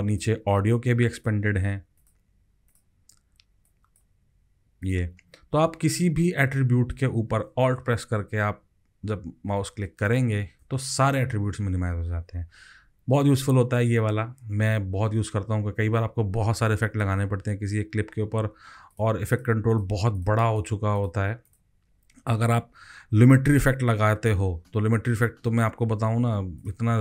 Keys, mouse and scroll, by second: 6.6 scroll up 4, 10.0 alt+click, 19.3 double click, 19.7 double click, 20.1 double click, 20.6 double click, 21.0 double click, 22.7-23.4 scroll down 11.